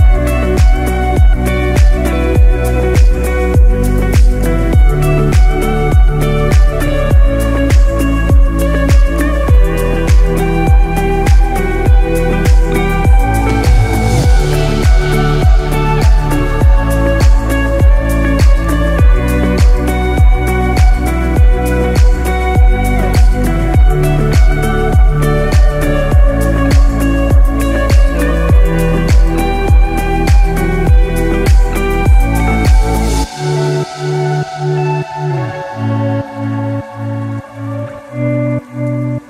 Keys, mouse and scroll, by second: 0.4 click, 7.9 middle click, 9.5 scroll down 3, 9.9 middle click, 11.4 click, 14.4 scroll up 1, 15.7 click, 17.4 scroll up 1, 17.8 scroll down 2, 18.6 Tab, 19.1-20.7 scroll up 3, 20.7 KP_1, 21.1 alt+z, 22.9 click, 25.1 alt+z, 26.1 scroll up 1, 26.4-26.7 scroll down 2, 27.1-27.6 scroll down 1, 27.6 shift+middle click, 28.7 scroll down 1, 29.1 shift+middle click, 29.6 s, 31.6-32.1 scroll up 5, 32.7 shift+middle click, 33.3 e.